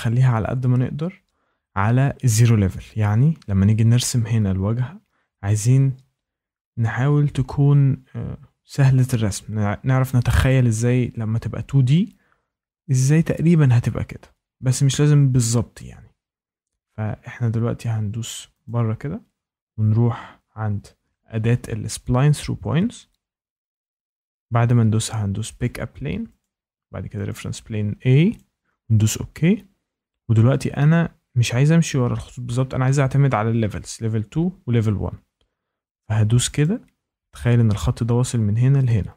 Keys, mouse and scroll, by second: 0.1 Down, 0.3 Down, 0.4 Down, 0.7 Down, 1.2 Left, 1.5 Left, 7.5 Left, 18.6-23.6 drag, 25.6 click, 26.4 click, 27.2 click, 28.3 click, 33.1 click, 36.6 click, 38.8 click.